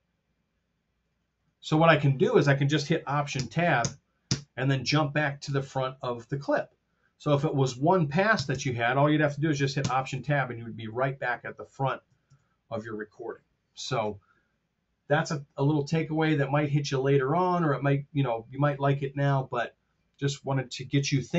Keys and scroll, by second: 3.3 alt+shift+Right, 8.3 Tab, 9.7 alt+Tab, 12.2 Page_Down.